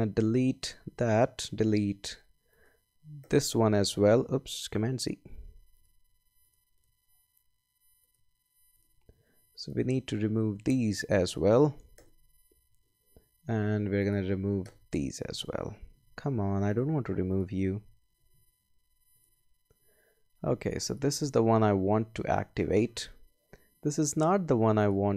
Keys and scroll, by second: 0.6 BackSpace, 3.2 BackSpace, 4.8 super+z, 11.9 BackSpace, 14.6 BackSpace, 16.0 super+z, 18.3 super+z.